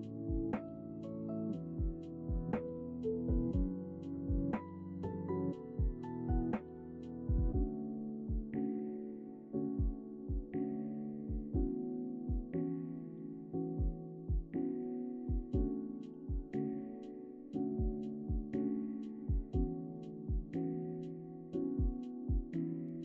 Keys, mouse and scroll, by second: 0.4 Tab, 0.6 s, 2.4 Tab, 2.5 g, 3.8 KP_1, 5.0 g, 6.1-6.5 scroll up 2, 6.5 Tab, 6.6 s, 7.5 KP_3, 8.3 shift+middle click, 8.8 a, 8.9 a, 9.3 c, 10.1 g, 11.6 a, 11.7 c, 12.2 g, 14.9 Tab, 15.1 middle click, 16.6 KP_1, 16.9 Tab, 17.4 a, 17.5 s, 18.5 middle click, 18.8 z, 19.0 middle click, 19.8 scroll up 1, 20.3 Tab, 20.5-21.0 scroll down 4, 21.0 right click, 21.6 h, 21.8 middle click, 22.3 right click, 22.5 middle click.